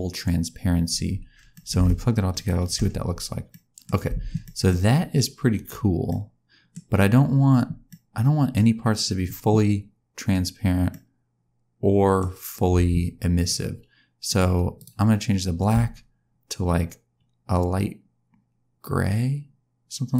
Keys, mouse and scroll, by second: 1.4 middle click, 1.7 shift+scroll down 1, 2.3 ctrl+shift+click, 3.4 scroll down 1, 3.6 middle click, 4.0 space, 4.4 middle click, 6.0 middle click, 7.8 middle click, 10.9 middle click, 12.7 space, 14.2 click, 14.7 click.